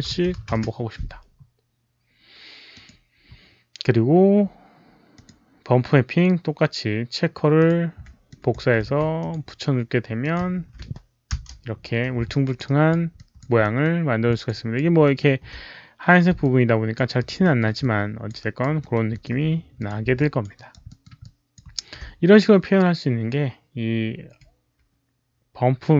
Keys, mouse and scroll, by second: 2.6 click, 5.0 Tab, 5.0 click, 5.0 KP_0, 5.0 KP_1, 5.1 Tab, 5.1 KP_0, 5.1 KP_1, 7.5 Return, 7.5 Tab, 7.5 click, 7.5 KP_0, 7.5 KP_1, 8.2 click, 9.1 click, 9.2 ctrl+c, 9.2 Return, 10.1 click, 10.5 ctrl+v, 11.2 Return, 12.2 alt+click, 12.5 alt+right click, 13.0 alt+click, 13.5 alt+middle click, 14.2 alt+click, 14.4 alt+right click, 14.9 alt+middle click, 16.3 alt+click, 16.9 alt+right click, 17.3 alt+middle click, 17.7 alt+click, 18.3 alt+right click, 18.7 alt+middle click, 19.0 alt+click, 19.7 alt+click, 20.1 alt+click, 20.4 alt+right click, 20.8 alt+middle click, 21.1 alt+click, 21.4 alt+middle click, 21.4 alt+right click.